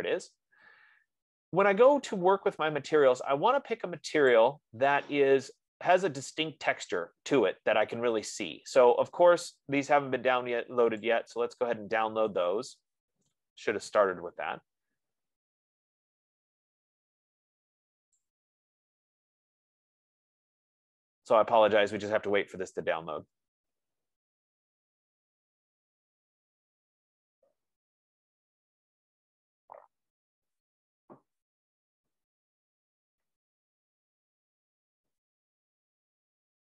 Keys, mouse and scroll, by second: 0.4 click, 0.4-1.0 scroll, 0.4 z, 4.7 click, 7.3 click, 11.5 click, 16.4 click, 18.6-23.6 drag, 34.5 F15.